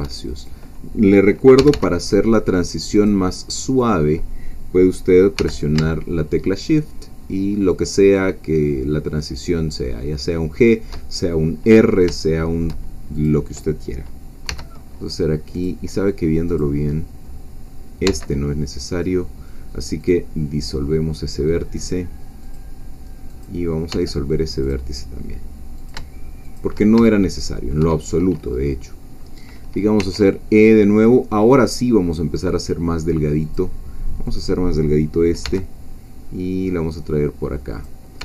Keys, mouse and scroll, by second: 0.4 shift+click, 1.6 g, 3.0-4.1 drag, 5.4 g, 10.6 shift+click, 11.6-11.9 scroll up 1, 12.3 shift+middle click, 13.2 click, 14.5 g, 15.6 click, 16.6-18.0 drag, 18.0 x, 20.0 click, 21.8 click, 22.4 click, 23.4 click, 23.9 x, 24.6 click, 25.8 shift+click, 26.4 shift+click, 27.0 shift+middle click, 30.0 e, 33.4 click, 34.4 click, 35.4 g, 37.7 click.